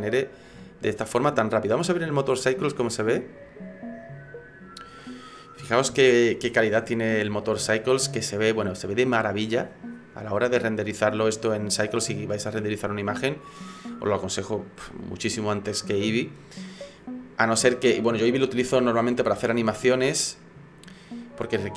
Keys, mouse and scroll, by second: 0.6 shift+middle click, 2.4 click, 13.4 right click.